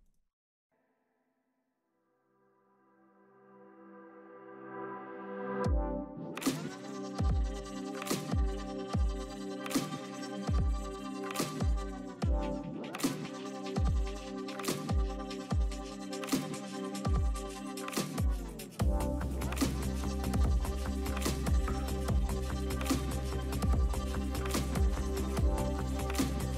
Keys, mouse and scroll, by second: 0.7 Tab, 1.2 s, 1.6 Tab, 2.1 Tab, 2.3 s, 3.0 Tab, 4.0 Tab, 4.5 s, 5.0 Tab, 5.2 Tab, 5.4 s, 6.1 Tab, 6.5 s, 6.7 Tab, 7.1 s, 7.8 Tab, 7.9 Tab, 8.3 Tab, 8.7 s, 9.2 Tab, 9.7 s, 9.9 Tab, 10.4 s, 13.9 Tab, 14.1 Tab, 14.3-19.7 typing, 14.5 Tab, 14.6 Tab, 15.3 Tab, 15.9 Tab, 17.1 Tab, 17.2 Tab, 17.6 Tab, 17.9 Tab, 18.3 Tab, 18.7 Tab, 19.3 Tab, 22.6 Tab, 22.8 Tab, 23.1 s, 23.3 Tab, 23.5 Tab, 24.2 Tab, 24.8 s, 25.1 Tab, 25.6 s, 26.4 Tab.